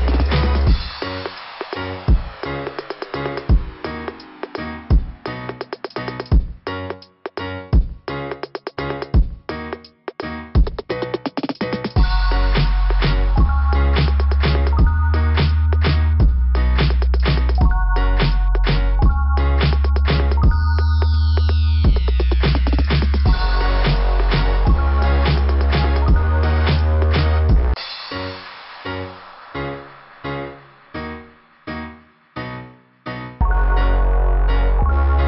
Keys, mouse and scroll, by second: 2.6 click, 2.7 click, 2.8 click, 4.0 click, 4.2 click, 5.8 click, 5.9 click, 6.7 click, 6.9 click, 7.6 click, 7.7 click, 7.8 click, 8.0 click, 9.1 scroll up 2, 11.2-11.6 scroll down 2, 13.5 click, 13.6 click, 14.6 click, 14.7 click, 16.2 click, 16.4 click, 17.9 click, 18.0 click, 19.1 click, 20.7 click, 20.9 click, 21.0 click, 21.3 click, 21.7-22.3 scroll up 2, 30.3 click, 31.3 click, 32.0 click, 33.4 scroll down 1, 34.4 right click, 34.7 right click.